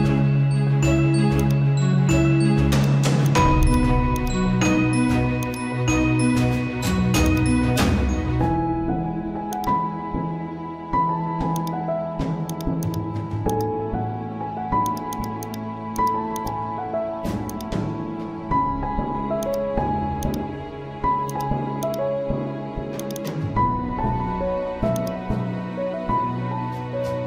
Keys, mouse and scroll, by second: 0.3 scroll down 1, 1.4 click, 1.9 scroll down 1, 2.7 click, 4.6-9.5 drag, 9.9 scroll down 1, 10.2 typing, 10.8 scroll up 1, 11.5-27.2 drag, 19.8 typing, 23.0 typing, 25.2 typing.